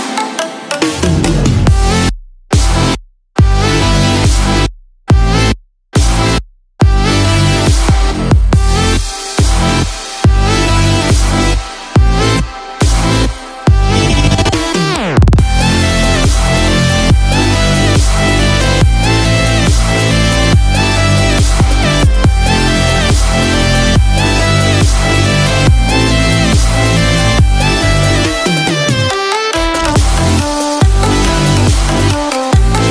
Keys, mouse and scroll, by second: 13.9 click, 13.9-14.4 scroll down 2, 13.9 n, 14.2 scroll up 1, 14.4 scroll down 1, 15.7 scroll down 1, 17.1-17.5 scroll up 6, 17.6 scroll down 1, 18.3 shift+middle click, 21.7 click, 24.0 ctrl+shift+t.